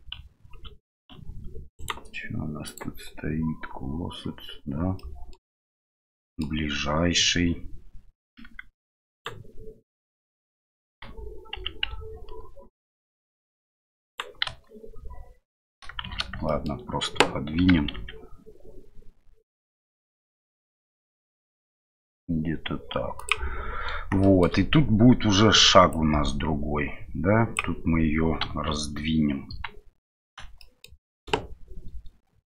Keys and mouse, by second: 2.6-4.4 drag, 5.0 middle click, 5.9-6.4 middle drag, 8.4 g, 14.4 KP_1, 16.0 shift+z, 16.4 shift+middle drag, 17.6 g, 25.9-27.6 drag, 28.4 KP_Divide.